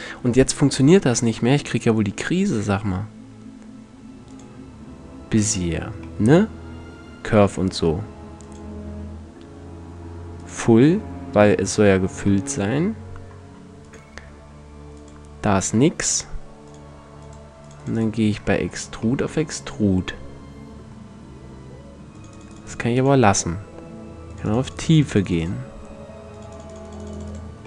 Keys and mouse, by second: 8.0 click, 9.9-11.1 middle drag, 13.4-15.3 middle drag, 21.8-27.6 middle drag.